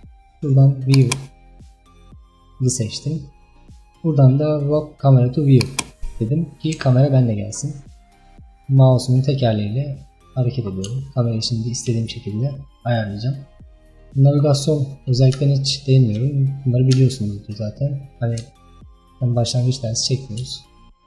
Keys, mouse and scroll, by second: 1.0 click, 5.7 click, 6.8 n, 7.3-8.5 scroll down 16, 8.9 scroll down 2, 9.5-10.1 scroll down 3, 10.1-10.7 middle drag, 10.7-11.1 scroll down 1, 11.1-14.1 shift+middle drag, 15.8-17.7 shift+middle drag, 17.7-18.1 scroll up 3, 18.1-18.6 scroll down 1, 18.6-21.0 shift+middle drag.